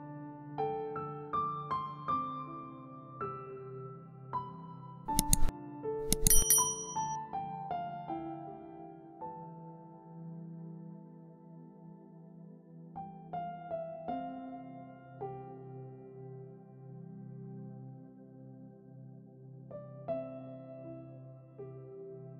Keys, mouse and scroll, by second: 0.0-8.3 typing, 9.3 e, 10.2 e, 11.8 i, 13.1-15.7 typing, 16.7 scroll up 2, 16.9 shift+middle click, 17.7-22.3 typing.